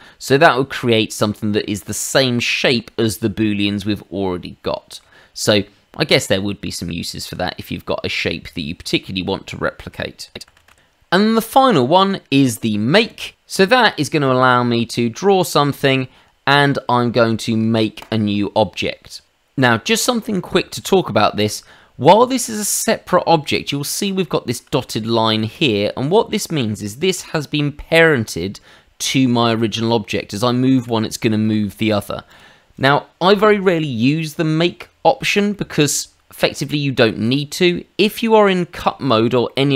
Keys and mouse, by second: 0.7 middle click, 2.0 middle click, 3.8 middle click, 7.4 middle click, 10.3 ctrl+z, 10.5 ctrl+z, 10.7 ctrl+z, 12.9 click, 13.3 middle click, 14.9 click, 16.5 middle click, 18.0 click, 19.9 shift+middle click, 21.4 click, 24.2 shift+middle click, 25.5 click, 26.0 shift+middle click, 27.1 g, 30.7 Escape, 31.4 shift+middle click, 32.2 click, 33.3 Delete, 34.2 middle click, 35.5 shift+middle click, 37.2 click, 38.1 click, 39.4 middle click.